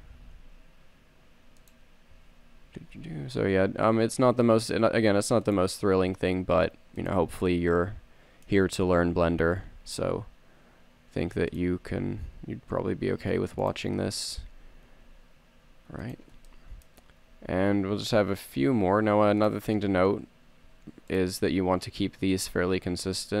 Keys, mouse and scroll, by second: 0.3 g, 3.1 e, 6.1 s, 7.8 middle click, 9.7 e, 12.0 click, 12.3 s, 14.5 g, 17.8 e, 20.1 s, 21.6 g.